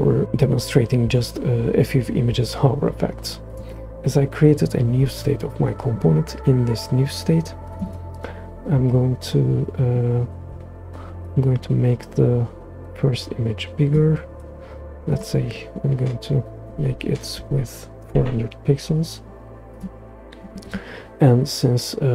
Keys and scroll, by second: 16.7-17.3 typing, 18.0 Return.